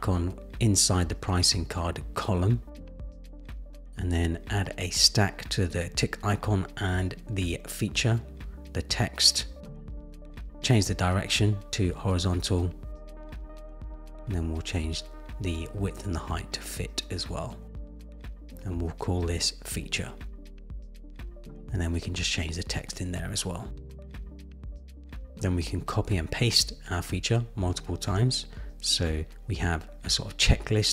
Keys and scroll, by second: 21.3 Return, 22.4 super+c, 23.4 super+v, 28.3 super+c, 28.5 super+v.